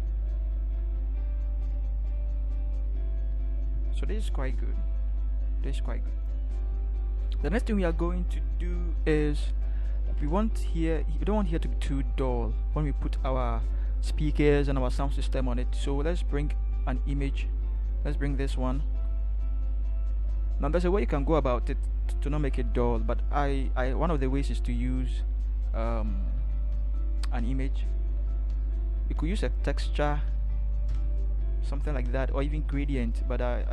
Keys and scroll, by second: 30.9 alt+shift+Return.